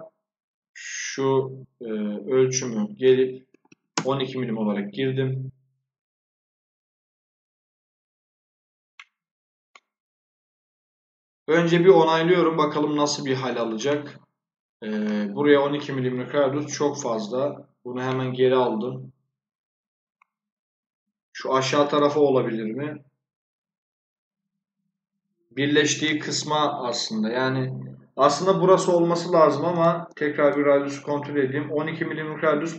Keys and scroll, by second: 3.2-4.1 typing, 16.5 ctrl+z.